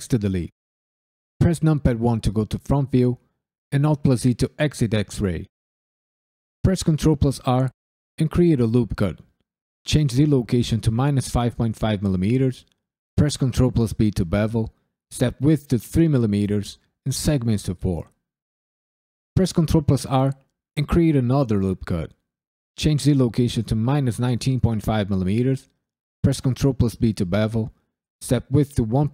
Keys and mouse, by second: 1.4 KP_1, 3.7 alt+z, 6.6 ctrl+r, 7.3 click, 7.6-8.8 right drag, 9.3-11.3 drag, 13.1 ctrl+b, 13.9 click, 15.0-17.8 drag, 19.3 ctrl+r, 20.8 click, 21.1-22.3 right drag, 22.9-24.8 drag, 26.5 ctrl+b, 27.2 click, 28.3-29.1 drag.